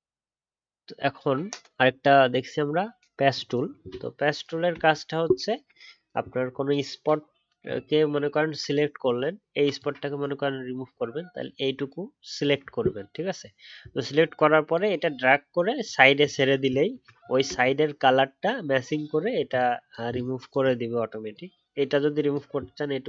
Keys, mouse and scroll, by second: 4.8-5.4 alt+scroll up 1, 17.5-18.7 alt+scroll up 3.